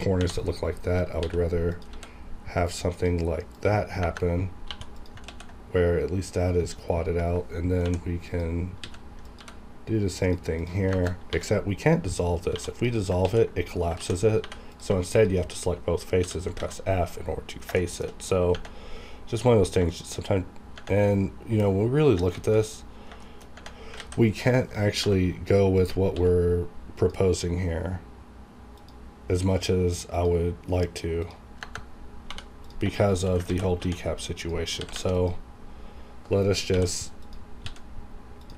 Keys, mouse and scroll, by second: 0.8 click, 1.2 c, 1.7 click, 1.9 e, 2.9 click, 4.0 KP_Enter, 4.7 2, 4.9 click, 5.3 ctrl+x, 7.8 k, 8.3 click, 8.7 c, 9.3 click, 9.4 e, 10.2 click, 10.2 click, 10.9 KP_Enter, 11.3 3, 11.8 click, 12.5 2, 12.7 click, 13.2 ctrl+x, 14.0 ctrl+z, 14.4 3, 14.7 click, 15.2 shift+click, 16.2 f, 16.6 alt+a, 17.2-17.7 scroll down 2, 17.8 shift+middle click, 18.0 shift+scroll down 1, 19.2-19.8 scroll up 1, 19.9 shift+middle drag, 20.2-20.8 shift+scroll up 2, 22.3 ctrl+z, 23.2 shift+middle click, 23.5-23.9 scroll up 2, 24.0 alt+a, 25.0 k, 25.8 click, 26.1 c, 27.0 click, 27.0 click, 31.6 KP_Enter, 32.3 2, 32.6 click, 33.1 shift+click, 33.5 ctrl+x, 33.8 1, 34.4 click, 34.8 g, 35.0 g, 35.1 click, 36.6 k, 37.1 click, 37.6 c, 38.4 click.